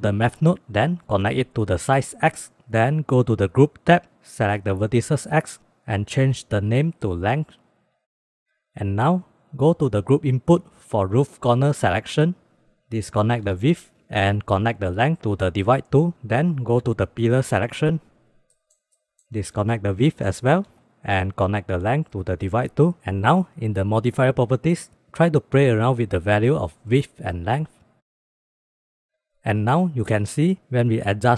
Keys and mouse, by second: 0.8-1.8 drag, 3.8 click, 6.4-8.4 drag, 6.9 shift+BackSpace, 9.4 middle click, 10.4 middle drag, 10.9-11.3 middle drag, 11.9 middle click, 13.7 ctrl+click, 14.8-15.8 drag, 17.0 click, 17.3 drag, 18.2 click, 18.2 middle click, 18.7 middle click, 20.6 ctrl+click, 22.0-22.8 drag, 23.0 ctrl+s, 26.2 click, 26.6 middle click, 27.3 middle click, 27.9 click, 28.5 shift+middle click, 31.0 middle drag.